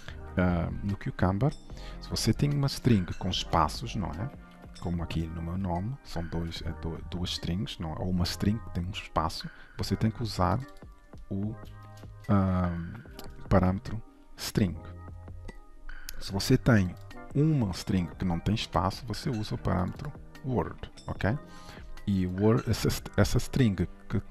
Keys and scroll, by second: 5.4 ctrl+shift+Right, 12.7 ctrl+shift+Right.